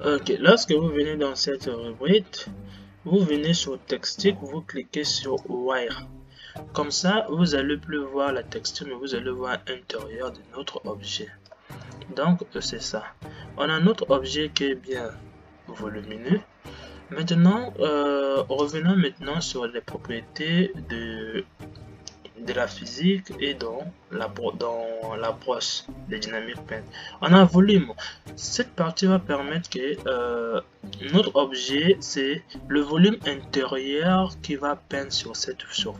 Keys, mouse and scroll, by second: 5.7 click, 7.6-11.9 middle drag, 11.9-12.3 drag, 12.9-19.1 middle drag, 19.1 click, 30.1-35.9 middle drag.